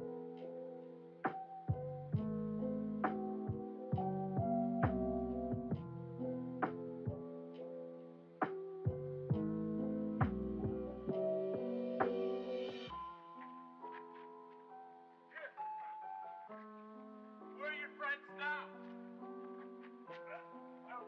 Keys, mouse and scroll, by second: 0.3 shift+middle click, 1.4 scroll up 2, 3.0 click, 6.1-8.3 drag, 8.9 click, 10.6 click, 12.8 click, 14.5 click, 15.9-17.3 drag, 18.3 click, 19.2 click, 19.9 click.